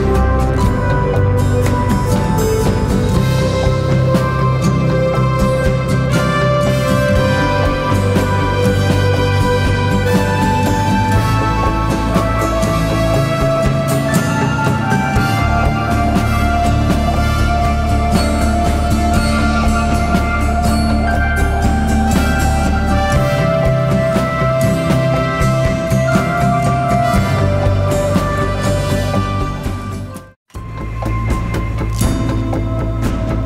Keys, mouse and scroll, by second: 2.4 right click, 3.3 click, 10.7 scroll up 1, 12.3 scroll up 1, 12.5-13.0 scroll down 1, 13.0-13.9 typing, 13.3 click, 13.7 click, 14.0 click, 15.1-18.0 drag, 18.0 z, 18.1 click, 20.5 click, 21.0 alt+click, 28.4 z, 28.6 click, 28.8 space, 28.9 click, 32.9 right click.